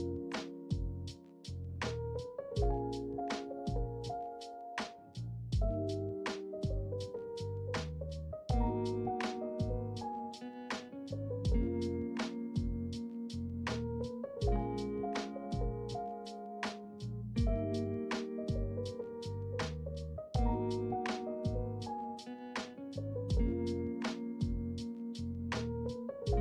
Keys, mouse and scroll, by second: 0.9-3.1 drag, 4.0-5.9 drag, 6.8 click, 7.6 middle click, 9.6 ctrl+Tab, 10.1 ctrl+r, 12.8 click, 13.6-14.8 drag, 15.9 click, 17.3 middle click, 19.0 shift+a, 19.1 middle click, 21.1-22.0 middle drag, 22.2-23.7 middle drag, 24.7 middle click.